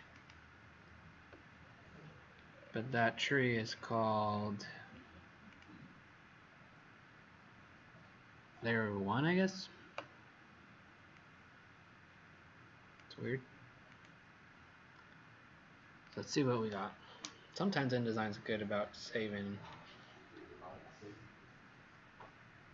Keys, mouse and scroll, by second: 2.4-4.4 scroll down 20, 5.4 click.